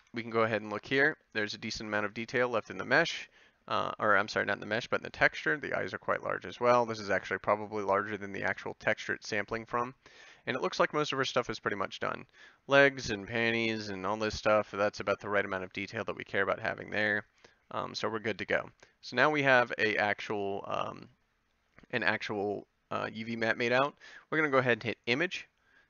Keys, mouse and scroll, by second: 0.0 Tab.